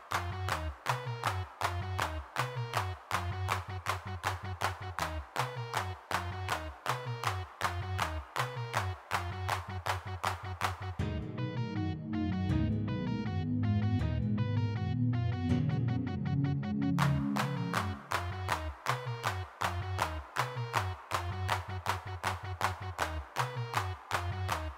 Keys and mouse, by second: 0.1 middle click, 0.6-1.8 middle drag, 1.8 g, 1.8 f, 4.0 middle click, 4.9 3, 5.0 f, 9.9-21.4 d, 22.7 ctrl+Up.